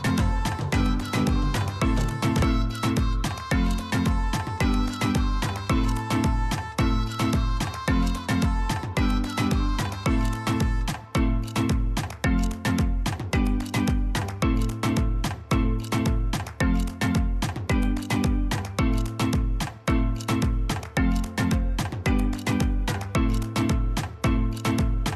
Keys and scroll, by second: 1.5 ctrl+z, 12.7 alt+Tab, 12.7 ctrl+a.